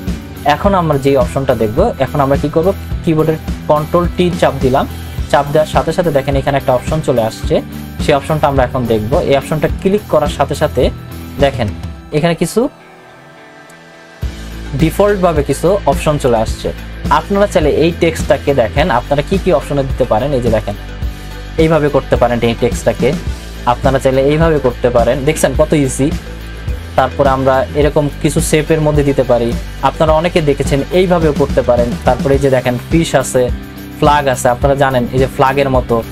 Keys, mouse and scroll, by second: 4.1 ctrl+t, 9.8 click, 19.2 click, 22.9 click, 26.4 click.